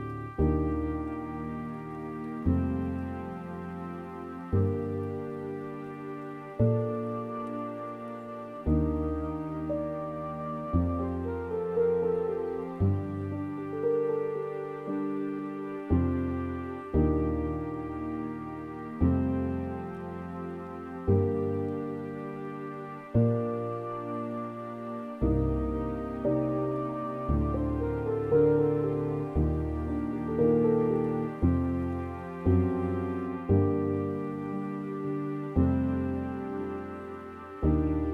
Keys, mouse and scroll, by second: 0.0-2.3 drag, 4.0 click, 4.8-6.8 scroll up 2, 6.8 click, 7.7-8.2 scroll up 4, 8.2 Tab, 8.6-9.4 scroll up 5, 12.6 u, 13.7-14.2 scroll down 5, 14.3 middle click, 14.8-15.7 scroll up 2, 16.1-16.5 scroll up 6, 16.5 middle click, 17.3 click, 17.7-23.8 middle drag, 23.8-24.5 scroll down 7, 24.5 middle click, 24.9 scroll up 3, 26.0 alt+shift+click, 26.8-28.9 middle drag, 28.9-33.8 right drag, 33.8 u, 37.9 u.